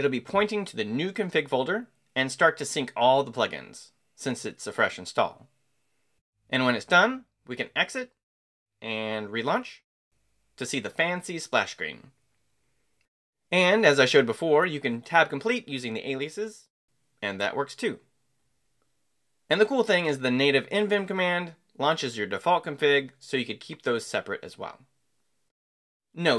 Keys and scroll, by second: 6.7 shift+Escape, 6.9 shift+;, 7.6 shift+q, 10.6 Return, 12.7 Escape, 12.8-13.7 typing, 18.5 Return, 20.1 Escape, 20.6 shift+;, 21.2 q, 23.2 Return.